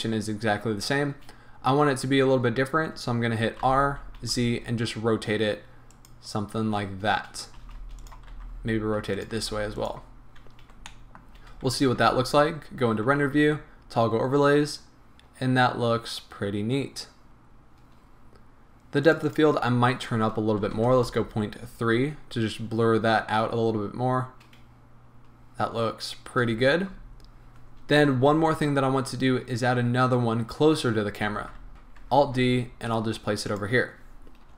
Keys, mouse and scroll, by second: 0.9 scroll down 1, 2.3-2.7 scroll up 1, 3.6 r, 5.8 middle click, 6.0 click, 7.6 g, 8.1 click, 8.3 r, 9.2 click, 9.3 g, 9.8 click, 10.8-12.6 shift+middle drag, 11.6 z, 19.1-31.7 drag, 21.2 Return, 26.4 z, 27.5 scroll down 1, 28.2 KP_7, 31.3 z, 31.7 KP_7, 32.2 alt+d, 33.6 click.